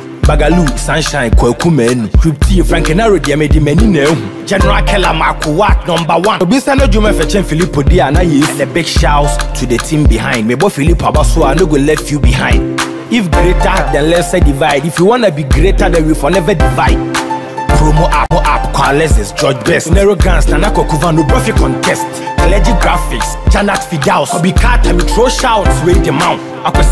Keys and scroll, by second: 0.6 ctrl+shift+i, 21.3 ctrl+d.